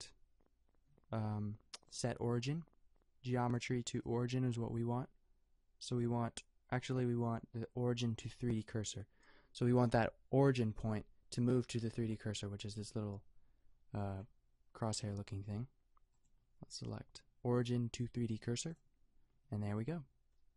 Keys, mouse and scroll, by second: 18.8-20.5 middle drag.